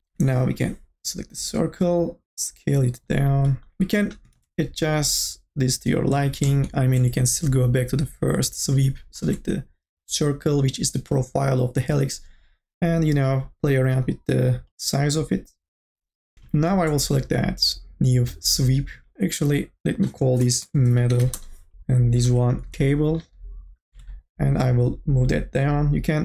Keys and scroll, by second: 0.5 t, 4.6 ctrl+z, 20.6 m, 20.8 e, 21.0 t, 21.3 Return, 22.5 c, 22.7 Return.